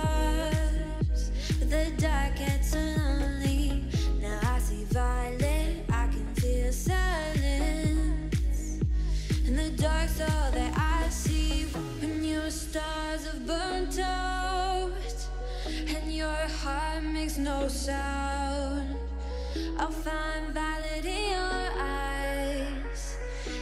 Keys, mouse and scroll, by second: 0.3 scroll down 3, 0.5 shift+middle click, 0.8 alt+z, 1.2 click, 1.3 middle click, 1.9 Tab, 2.2 click, 2.3-3.4 shift+middle drag, 3.4 click, 3.7 click, 4.1 click, 4.4-4.7 middle drag, 4.7 scroll down 2, 4.9-5.6 middle drag, 5.6 click, 6.3-7.8 drag, 8.7 click, 9.0-10.2 middle drag, 10.2 click, 10.4 Tab, 10.8 a, 11.0 3, 11.2-12.5 right drag, 12.5 click, 12.7 Tab, 13.1 middle click, 13.4 click, 13.5-13.9 middle drag, 13.9 scroll up 2, 14.1-15.5 middle drag, 15.5 click, 16.1-17.6 drag, 18.0 middle click, 18.3 Tab, 19.2 a, 19.4-20.0 right drag, 20.0 click, 20.2 Tab, 20.7-21.1 middle drag, 21.1 scroll down 1, 21.4 middle click, 21.6 click, 21.8-23.2 middle drag, 23.2 click.